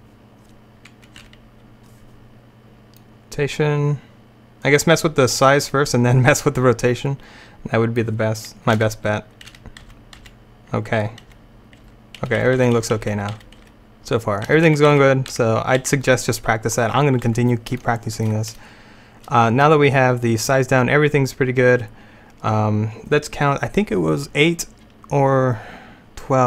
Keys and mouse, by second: 1.3 Right, 8.8 Right, 9.6 Right, 9.9 Right, 10.3 Right, 11.3 Right, 11.9 Right, 12.3 Left, 12.5 Left, 12.7 Left, 12.9 Left, 13.1 Left, 13.2 Left, 13.5 Left, 13.7 Left, 14.6 Right, 14.8 Right, 15.0 Right, 15.5 Right, 15.9 Right.